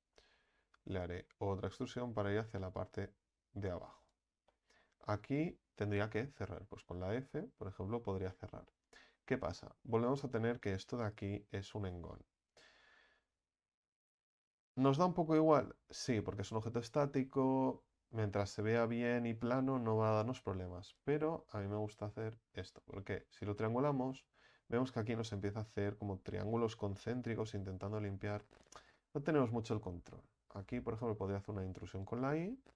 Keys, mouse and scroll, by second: 0.7 e, 1.7-4.5 drag, 4.5-6.7 middle drag, 6.7 f, 7.3-11.1 middle drag, 11.1 right click, 11.6 alt+shift+right click, 12.1-22.1 middle drag, 22.1 ctrl+t, 22.9-28.0 middle drag, 28.0 ctrl+z, 28.6-30.8 middle drag.